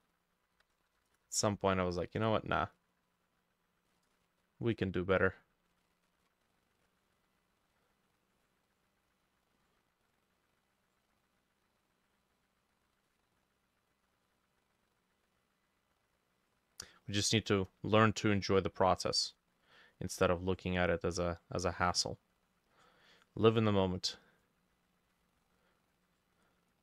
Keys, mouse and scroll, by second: 0.6-1.6 typing, 7.2-26.8 drag, 19.2 middle click.